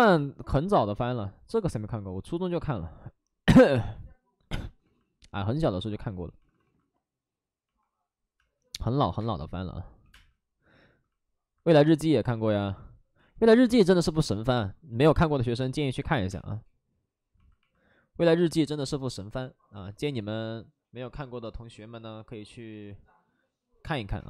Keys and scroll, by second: 3.6 ctrl+z, 6.4 ctrl+z, 6.4 alt+s, 8.3 space, 9.1 space, 10.0 space, 10.0 2, 12.2 1, 14.9 ctrl+z, 15.4 space, 16.1 5, 16.2 space, 18.9 space.